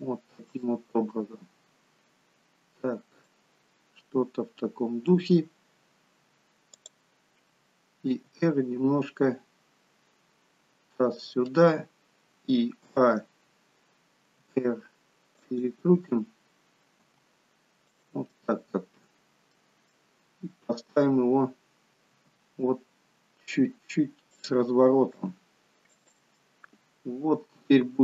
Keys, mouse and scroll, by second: 0.5 middle click, 5.0 middle click, 6.6 click, 8.0 r, 12.8 a, 14.3 r, 17.0 g, 18.2 middle click, 19.9 middle click, 21.2-21.7 scroll down 1, 22.0 r, 25.2 g, 26.4 middle click.